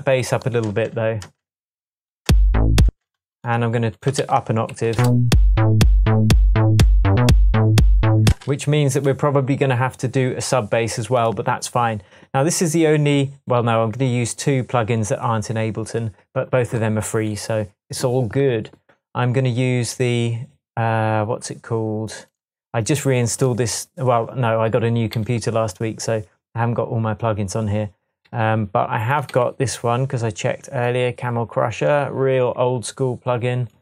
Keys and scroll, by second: 0.7 space, 2.9 space, 4.2 a, 4.8 a, 5.0 Up, 5.3 shift+space, 6.1 space, 6.8 Tab, 8.3 space, 25.1 Right, 28.3 Left, 29.3 Right.